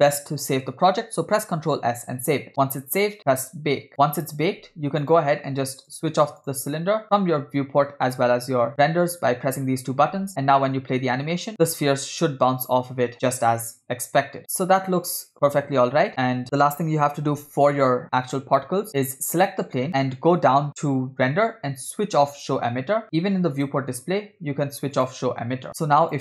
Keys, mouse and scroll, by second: 5.0 click, 5.9 click, 6.5 click, 10.1 space, 11.5 middle click, 11.5 scroll up 1, 16.4 space, 18.3 click, 19.9-21.6 scroll down 12, 22.5 click, 23.7 click, 24.1-25.1 scroll down 2, 25.1 scroll down 1, 25.1 click, 26.0 click.